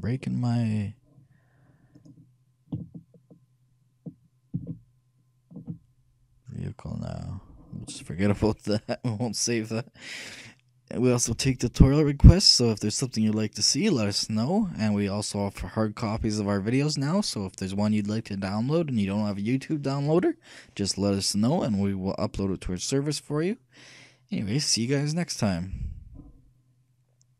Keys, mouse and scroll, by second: 5.0 ctrl+z.